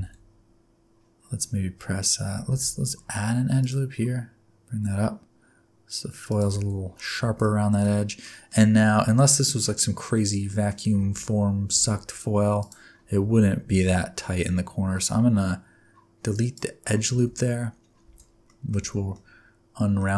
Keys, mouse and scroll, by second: 1.8-2.3 scroll up 3, 2.4 ctrl+r, 6.5 alt+z, 6.9 scroll down 4, 7.2 alt+z, 7.4 middle click, 7.8-8.2 scroll down 1, 8.2 middle click, 8.6 scroll up 3, 8.9 alt+z, 9.6 middle click, 10.4 middle click, 10.9 alt+z, 11.4 scroll up 1, 11.7 alt+z, 12.5 alt+click, 13.2 alt+z, 13.6 x, 17.1 alt+z, 17.5-18.0 scroll down 4, 18.0 alt+z, 18.4 middle click, 18.8 alt+z, 19.1 middle click, 20.1 alt+z.